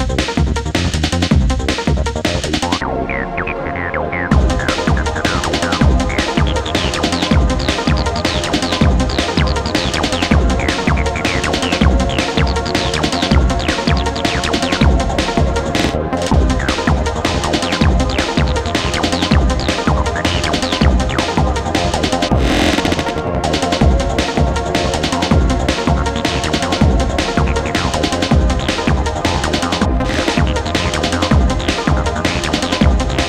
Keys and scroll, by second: 12.5 4, 17.0 3, 18.8 g, 18.9 l, 18.9 o, 19.1 w, 19.2 Return, 29.9 ], 30.7 ].